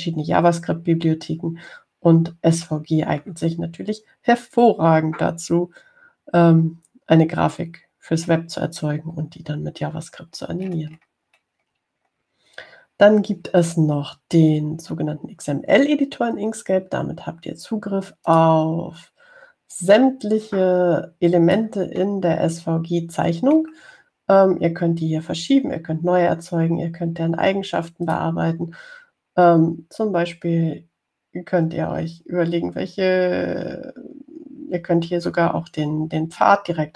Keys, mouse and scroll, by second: 11.2-13.6 scroll down 4, 19.5 click, 21.0-23.0 drag, 23.3-25.0 middle drag, 29.3 click.